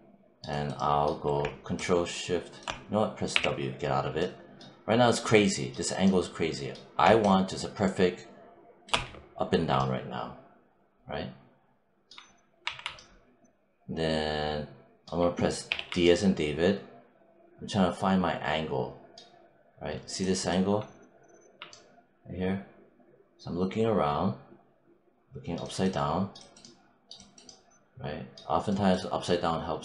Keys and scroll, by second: 3.2 w, 12.5 1, 15.5 d.